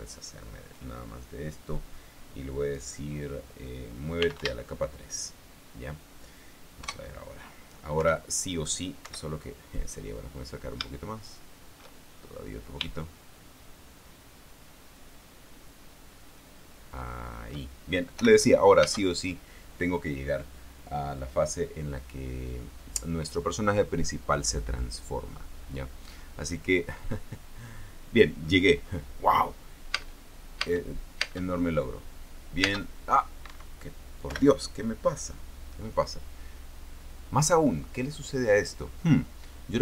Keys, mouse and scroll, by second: 0.1 shift+right click, 4.7-5.6 typing, 7.5 KP_0, 8.7 p, 9.7 Escape, 10.4-10.8 scroll up 2, 11.6-12.8 shift+middle drag, 12.8-13.6 shift+scroll up 2, 13.6-18.4 shift+middle drag, 18.9 p, 19.6 space, 30.7 space, 31.5 space, 33.3 space, 34.2 Escape, 35.0 p.